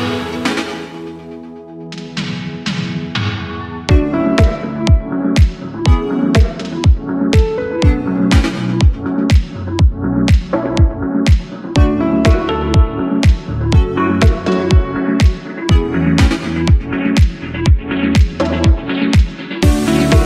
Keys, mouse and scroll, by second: 0.0 click, 0.5-1.9 middle drag, 1.9 1, 2.4 click, 3.4 KP_3, 4.2-4.6 scroll up 3, 4.7-5.3 shift+middle drag, 6.1 g, 8.9 click, 9.6 scroll down 1, 10.0 Tab, 10.4-10.8 scroll down 2, 10.8-15.1 middle drag, 18.6 KP_1, 19.8 Tab.